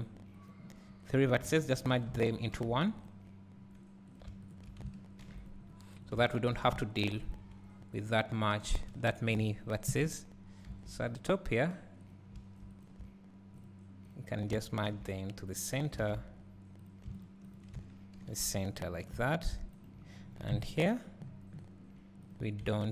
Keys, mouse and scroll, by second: 9.2 shift+click, 9.9 KP_Decimal, 11.2 x, 12.2 click, 13.7 shift+click, 16.0 alt+a, 16.9 click, 17.2 shift+click, 20.6 KP_Decimal, 21.2 scroll up 1, 22.3 click.